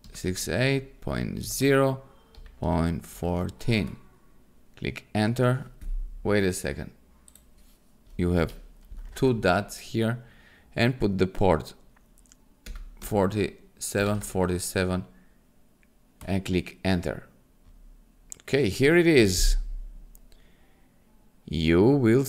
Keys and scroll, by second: 0.0-3.5 typing, 3.8 Return, 8.3 Right, 9.0 shift+;, 12.6-14.6 typing, 16.2 Return.